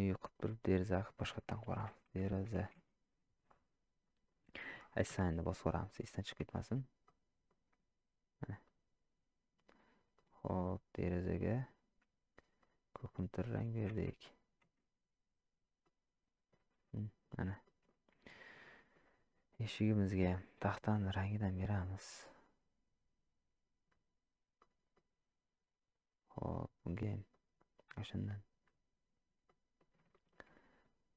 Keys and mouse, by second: 1.0-4.3 drag, 5.6 click, 7.0-7.5 middle drag, 8.6 click, 10.1 click, 15.8-17.0 middle drag, 17.6 shift+middle drag, 18.6 middle drag, 22.6-23.9 drag, 24.6-24.9 middle drag, 27.3-28.6 drag, 29.5-29.8 middle drag, 30.1 shift+middle drag.